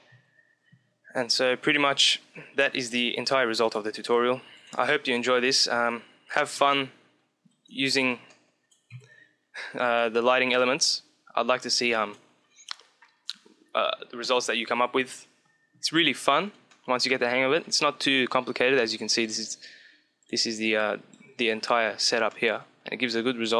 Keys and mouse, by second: 0.0 Escape, 2.7 click, 4.3 click, 4.7 click, 6.5 KP_0, 7.1 middle click, 7.8 middle click, 8.8 KP_3, 10.6-12.2 middle drag, 16.6-19.1 middle drag, 19.1 click, 20.7 click, 21.3 middle click, 22.2 middle click, 23.4-23.5 drag.